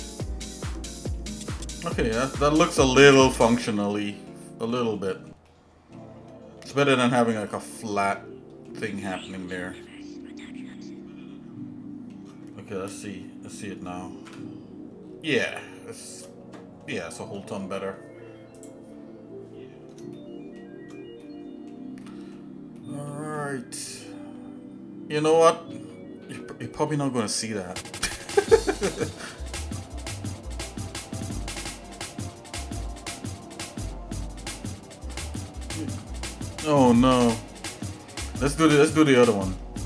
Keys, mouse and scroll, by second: 0.2 shift+middle click, 1.2 shift+middle click, 2.0 shift+middle click, 2.7 shift+middle click, 3.5 shift+middle click, 4.0 shift+middle click, 4.4 shift+middle click, 4.8 shift+middle click, 5.1 shift+middle click, 5.5 shift+middle click, 6.8 Tab, 8.2 shift+middle click, 9.0-12.1 shift+middle drag, 14.6 KP_Divide, 15.0-15.5 scroll down 2, 15.5 shift+middle click, 17.0 shift+middle click, 18.9 click, 20.1 shift+middle click, 21.2 middle click, 22.0 middle click, 22.8 middle click, 23.4 shift+middle click, 36.7 middle click, 37.3 middle click, 38.0 shift+middle click, 38.9 shift+middle click.